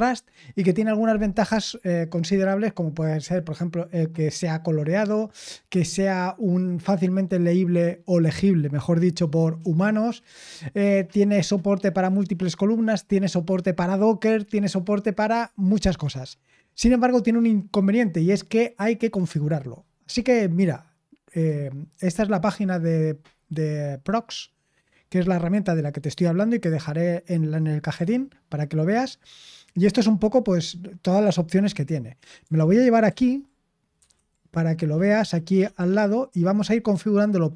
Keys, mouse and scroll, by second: 25.7-27.0 scroll down 1, 27.0-28.2 scroll down 1, 28.2-29.9 scroll down 1, 29.9-30.4 scroll down 1, 30.4-31.8 scroll down 1, 31.8-32.3 scroll down 1, 32.3-33.0 scroll down 1, 33.0 super+/, 34.0 super+7.